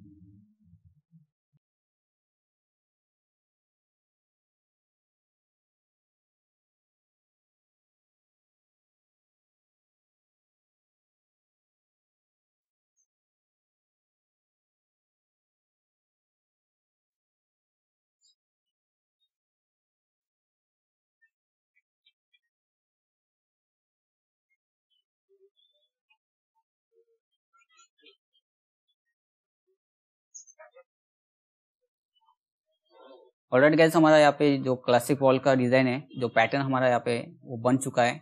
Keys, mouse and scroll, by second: 1.1-4.8 drag, 19.5 click, 20.6 ctrl+z, 21.1 click, 21.6 ctrl+click, 22.7 ctrl+click, 23.7 ctrl+click, 23.9-26.1 drag, 26.3 click, 28.4 click, 29.6 click, 31.0 click, 31.5 scroll up 1.